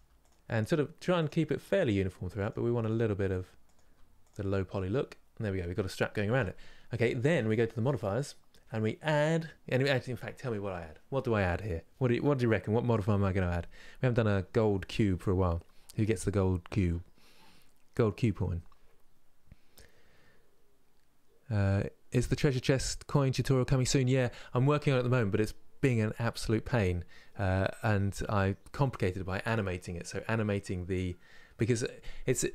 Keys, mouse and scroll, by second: 0.2 middle click, 0.9 click, 2.2 click, 2.2 g, 3.4 click, 3.5 g, 4.3 scroll down 3.